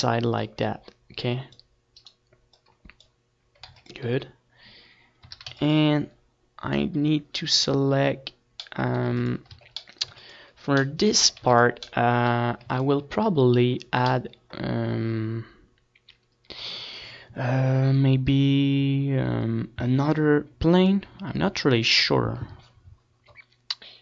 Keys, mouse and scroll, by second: 0.3 c, 1.1 click, 1.9 right click, 2.4 ctrl+r, 3.0 right click, 3.0 a, 3.4 ctrl+r, 3.9 a, 5.4 middle click, 6.1 click, 6.5-7.9 middle drag, 7.9 click, 8.1 middle click, 8.4 right click, 8.5 middle click, 9.4 ctrl+s, 9.4 click, 10.8 a, 11.2 ctrl+s, 14.0-15.2 middle drag, 14.6 ctrl+s, 14.9 Tab, 15.5 ctrl+s, 16.8 ctrl+s, 18.1 ctrl+s.